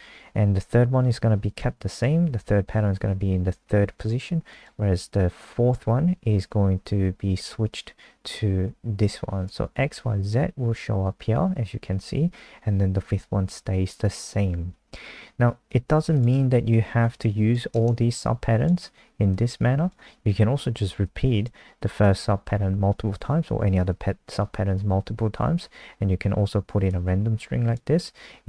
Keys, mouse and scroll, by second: 18.2 click.